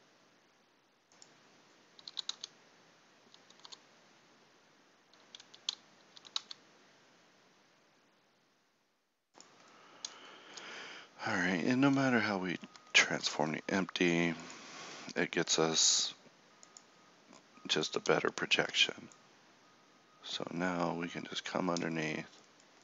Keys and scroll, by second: 2.0 s, 6.2 s.